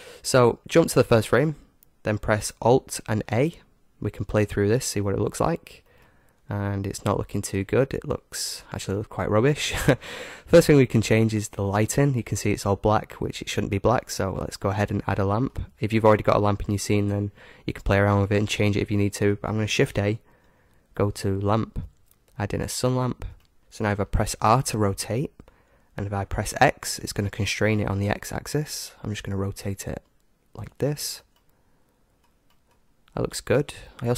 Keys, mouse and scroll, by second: 1.0-2.9 drag, 3.3 alt+a, 6.0-7.7 middle drag, 12.0-13.8 drag, 15.1-17.0 middle drag, 19.9 shift+a, 23.3-24.3 middle drag, 24.9 r, 31.3-34.1 middle drag.